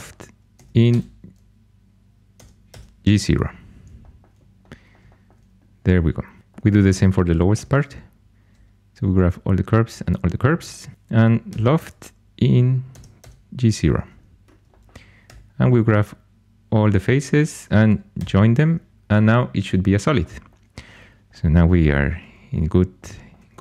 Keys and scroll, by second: 2.3 Tab, 2.6 Tab, 7.5 2, 11.4 |, 12.9 Tab, 13.1 Tab, 15.2 4, 18.1 j.